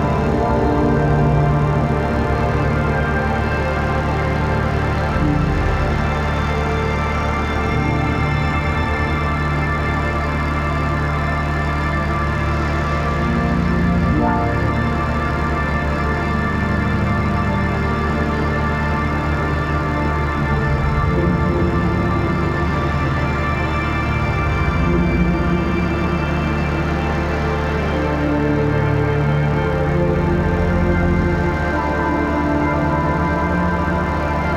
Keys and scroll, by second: 0.7 ], 3.2 ], 3.5 [, 4.8 [, 4.9 ], 5.1 [, 6.1 [, 8.7 ctrl+s, 11.9 ctrl+t, 18.9 ctrl+j, 19.3 ctrl+t, 28.4 Down, 28.6 Left, 30.2 ctrl+s.